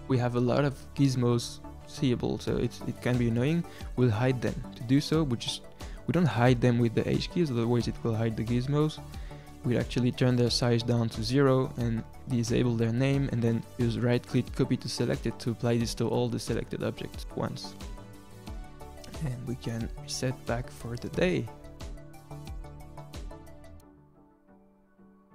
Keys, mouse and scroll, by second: 0.8 n, 1.2-2.4 middle drag, 2.4 click, 2.6-3.4 scroll down 1, 3.4 shift+click, 5.2-6.2 scroll up 2, 6.2-8.7 drag, 8.7-12.7 right drag, 12.7 click, 13.5-14.7 scroll down 1, 14.7-16.5 right drag, 16.5 click, 16.8 click, 17.1-18.8 right drag, 19.1 click, 19.6-20.7 drag, 21.3 drag, 22.1 click.